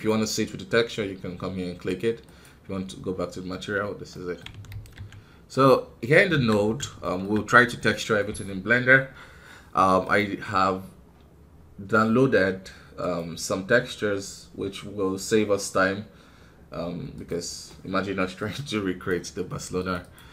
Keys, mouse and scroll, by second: 4.0 middle click, 4.9 ctrl+s, 5.6 click, 6.0 scroll down 1, 6.2 KP_1, 6.6 scroll down 3, 6.9-20.3 shift+middle drag.